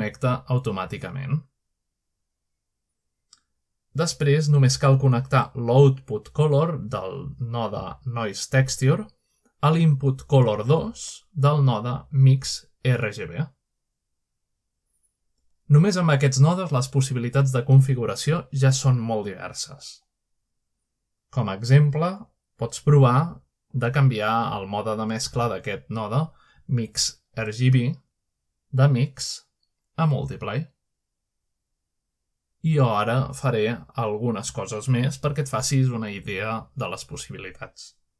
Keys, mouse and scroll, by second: 0.0 click, 2.5-3.0 scroll down 1, 5.0-6.0 scroll up 1, 6.8-13.3 drag, 14.7-15.8 scroll up 2, 16.0-16.6 scroll up 3, 16.6-17.3 scroll down 2, 17.4-18.3 shift+middle drag, 18.4 scroll down 2, 18.6 scroll up 2, 20.1 click, 21.9-23.2 drag, 24.6 click, 26.7 click, 28.3 click, 30.8 click, 33.0-34.8 drag, 36.6-38.1 drag.